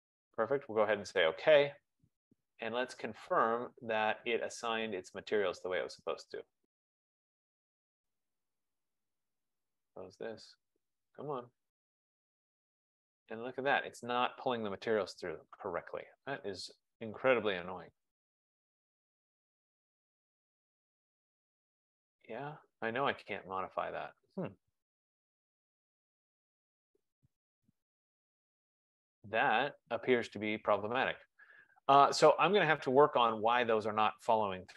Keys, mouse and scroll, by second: 1.3 click, 3.7 click, 5.1 click, 5.2 F15, 7.1 click, 10.1 click, 11.7 click, 16.5 click, 20.1 click, 23.7 click, 25.5 click, 32.1 click.